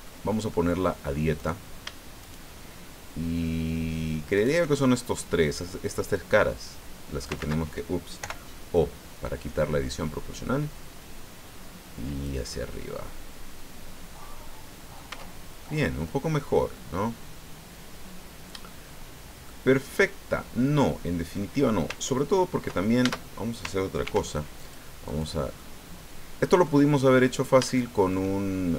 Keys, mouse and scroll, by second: 0.5 click, 1.4 right click, 2.2 shift+right click, 4.3 shift+right click, 6.1-7.4 drag, 7.4 ctrl+z, 8.2 o, 9.4-12.4 drag, 12.5-15.2 drag, 15.2 Tab, 15.6-18.5 drag, 18.5 middle click, 19.0 scroll down 1, 19.4-21.6 middle drag, 23.0 ctrl+Tab, 24.0 ctrl+r, 24.6 ctrl+click, 25.1 click, 25.6-26.8 drag, 27.0 scroll up 2, 27.7 shift+click.